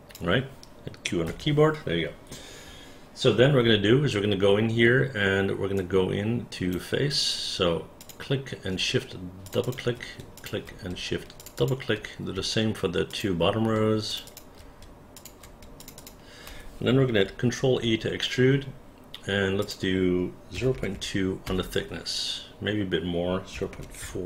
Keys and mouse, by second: 5.9 right click, 8.1 click, 9.5 shift+click, 9.7 shift+click, 10.5 shift+click, 11.5 shift+click, 11.7 shift+click, 13.2 shift+click, 14.2 shift+click, 14.4 shift+click, 15.3 shift+click, 15.9 shift+click, 17.5 ctrl+e, 19.7 click, 20.6 KP_0, 20.8 KP_Decimal, 21.0 KP_2, 21.5 Return, 23.6 KP_0, 23.8 KP_Decimal, 24.1 KP_4.